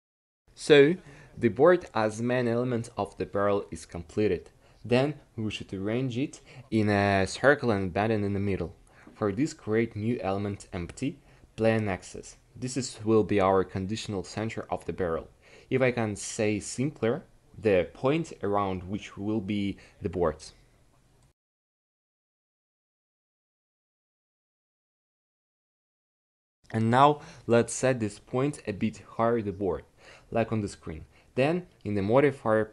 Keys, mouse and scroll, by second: 1.4 Tab, 5.8 shift+a, 16.9-18.4 drag, 23.3 n, 27.1-30.3 drag.